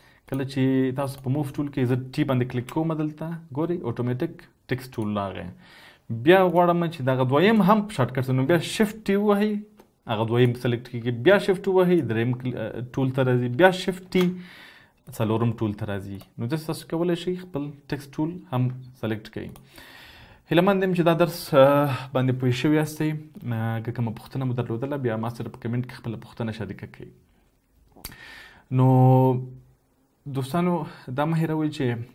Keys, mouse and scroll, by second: 2.6 t, 4.9 right click, 9.2 t, 10.4 right click, 11.3 t, 11.9 right click, 14.0 t, 15.1 right click.